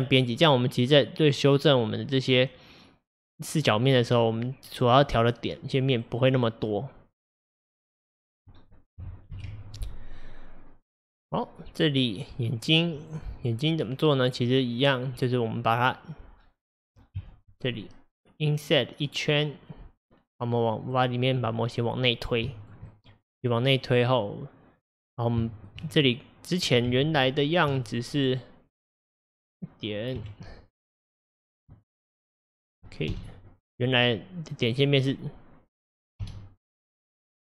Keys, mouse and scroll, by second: 5.0-8.0 middle drag, 9.4 ctrl+alt+F11, 11.1-13.1 middle drag, 13.1 click, 13.5-16.3 middle drag, 16.3 scroll up 2, 16.7 middle click, 17.2 KP_1, 19.5 scroll up 2, 20.5-21.0 middle drag, 21.0 scroll down 2, 21.5-25.2 middle drag, 25.2-25.5 scroll up 1, 25.5-25.9 shift+middle drag, 25.9-26.9 scroll up 1, 26.9 Tab, 28.2 click, 30.2 1, 30.8 click, 31.5 shift+click, 33.2 k, 36.3 k.